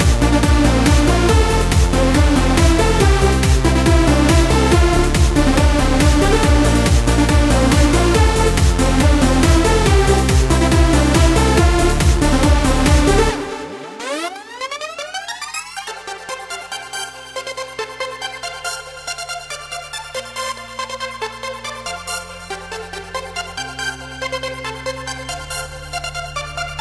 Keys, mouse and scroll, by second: 1.1 Tab, 1.4 middle click, 1.8 a, 2.3 click, 3.1 middle click, 3.9 Tab, 4.4-4.9 scroll down 1, 5.8 click, 7.2 click, 8.5-9.5 middle drag, 9.1 Tab, 10.2 z, 11.4 middle click, 13.5 right click, 14.2 l, 14.9 l, 15.2 middle click, 16.2 shift+d, 17.2 right click, 18.4 p, 19.5 click, 20.2 middle click, 20.8 right click, 21.0 middle click, 21.3 g, 21.6 right click, 22.0 m, 23.1 click, 23.4 right click, 23.5 middle click, 24.4 scroll up 1, 24.9-26.0 middle drag, 26.0 scroll up 1, 26.1 middle click, 26.4 click.